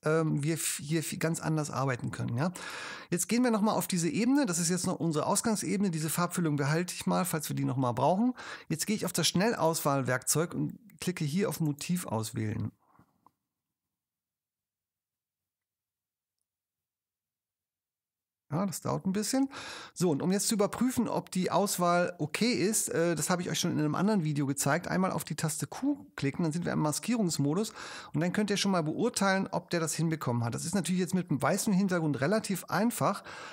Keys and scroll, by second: 25.8 p.